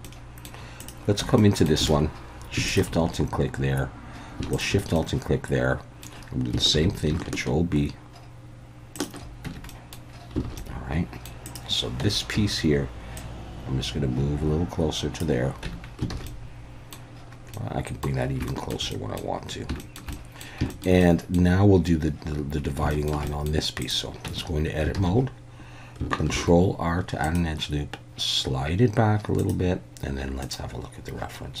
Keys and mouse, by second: 0.0-0.4 middle drag, 0.8 click, 1.2 Tab, 1.4 middle click, 1.9 alt+a, 2.7 alt+shift+click, 4.5 alt+shift+click, 4.9-6.0 middle drag, 6.7 ctrl+b, 8.9 shift+click, 9.4 Tab, 9.7 middle drag, 10.4 alt+a, 10.6-11.3 middle drag, 12.0 Tab, 12.3 a, 13.2-15.2 drag, 15.6 Tab, 16.1 alt+a, 16.3-16.9 middle drag, 17.5-18.0 middle drag, 18.5 shift+middle click, 18.9-19.2 middle drag, 19.8 shift+middle drag, 20.1 middle drag, 20.7 shift+middle click, 21.0-21.3 middle drag, 22.9 shift+middle drag, 23.3 middle click, 23.8 click, 24.2 Tab, 25.0 alt+a, 26.3 ctrl+r, 29.4 click.